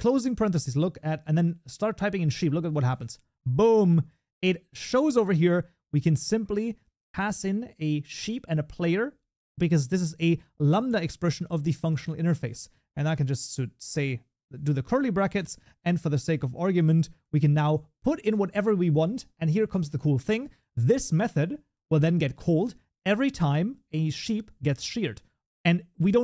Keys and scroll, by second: 11.6 Tab, 18.6 ctrl+s.